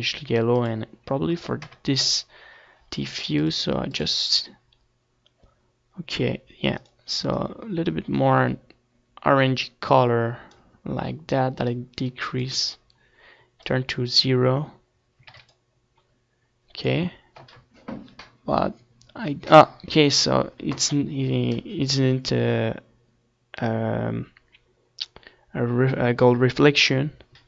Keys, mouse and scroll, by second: 0.5-1.8 drag, 2.9-4.7 drag, 3.6 KP_0, 4.7 middle click, 5.3-7.0 drag, 8.6-10.5 drag, 15.4-17.1 drag, 17.1 ctrl+s.